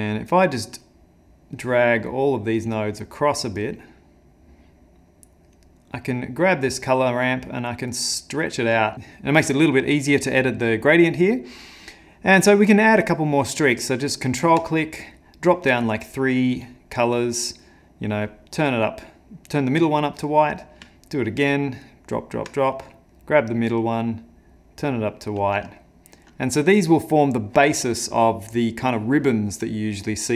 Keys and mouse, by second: 0.7 click, 1.6 click, 2.5 click, 3.6 click, 5.6 click, 7.6 click, 8.9 ctrl+middle click, 12.9 ctrl+click, 15.2 ctrl+click, 16.1 click, 21.3 ctrl+click, 22.8 ctrl+click, 23.0 click, 25.9 shift+middle click.